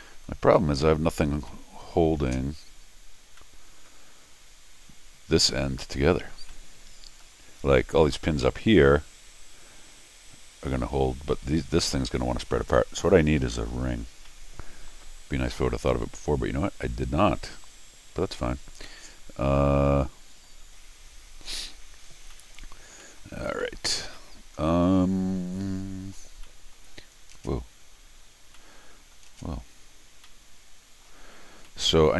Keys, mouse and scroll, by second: 0.5 middle click, 1.5 middle click, 3.4 middle click, 6.5 middle click, 12.7 middle click, 13.3 scroll up 1, 13.5 middle click, 14.3 middle click, 18.9 middle click, 19.6 middle click, 20.3 middle click, 22.1 scroll down 2, 22.3 middle click, 23.0 middle click, 23.6 middle click, 24.1-26.1 middle drag, 26.4 middle click, 27.4 space, 28.6 middle click, 29.4 space, 29.9-30.2 scroll down 2, 30.2 middle click, 31.3-31.7 scroll up 2, 31.7 middle click.